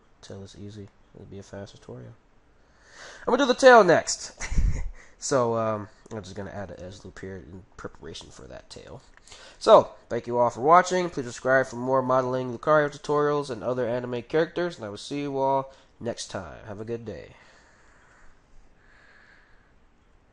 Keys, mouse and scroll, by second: 5.4 ctrl+r, 6.7 ctrl+r, 9.3-11.2 middle drag, 12.1-15.8 middle drag, 16.2-17.8 middle drag, 17.9 middle click.